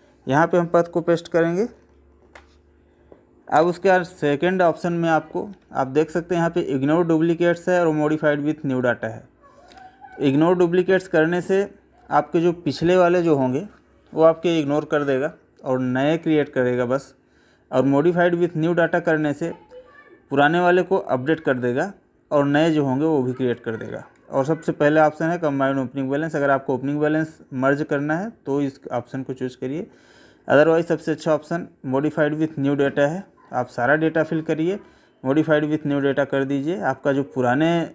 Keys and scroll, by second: 2.2 ctrl+alt+v, 5.5 Up, 7.7 Down, 9.7 Up, 17.7 Down, 24.1 Up, 25.4 Up, 30.5 Down.